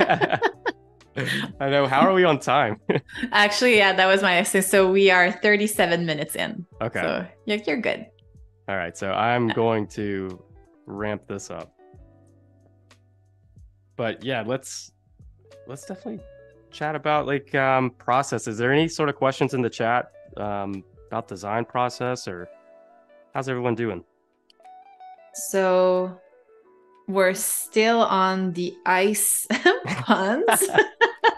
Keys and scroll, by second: 2.7 z, 4.9 a, 11.6 shift+b, 12.6 super+-, 13.3 space, 14.0 super+-, 14.4 space, 16.9 super+=, 19.5 a, 24.4 shift+b, 25.6 ], 28.9 super+z, 29.4 [.